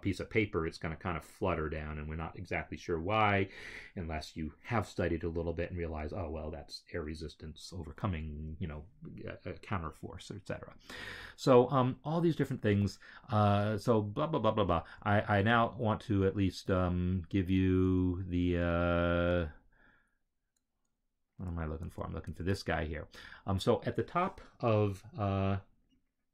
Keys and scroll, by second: 12.6 alt+Tab, 15.1 alt+Tab, 18.0 alt+Tab, 22.0 alt+Tab.